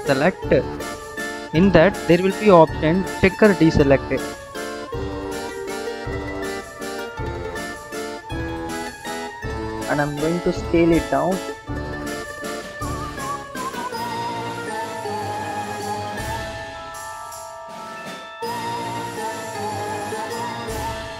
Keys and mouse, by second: 0.7-6.5 drag, 9.0 s, 12.8 Tab, 13.7-15.1 drag, 15.6 Tab, 20.3 click.